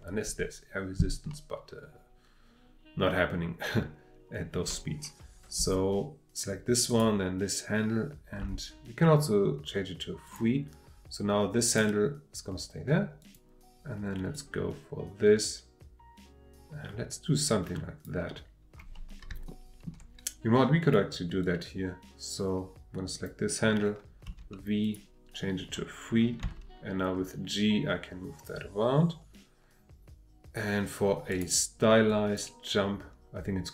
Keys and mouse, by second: 6.9 click, 8.4 v, 11.6 click, 13.2 click, 14.3-18.0 drag, 19.3-20.8 shift+middle drag, 20.8 click, 21.4 click, 23.1 click, 24.3 v, 26.4 g, 31.3 click, 32.1-32.5 drag.